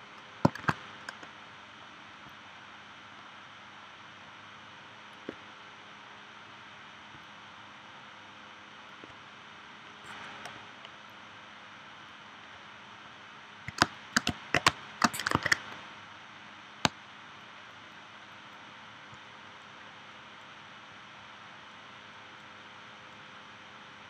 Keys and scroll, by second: 0.6 shift+w, 13.8 space, 14.7 space, 15.4 super+s, 16.8 space.